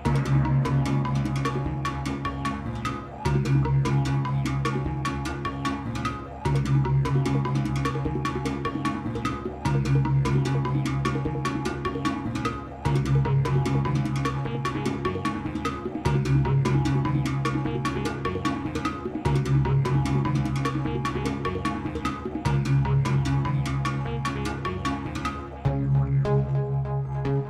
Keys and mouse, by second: 0.6 shift+n, 0.9 shift+d, 6.2 g, 12.1-15.8 drag, 12.1 BackSpace, 15.8 space, 17.5 space, 19.4 space, 22.0 space, 22.5 click, 23.9 shift+d.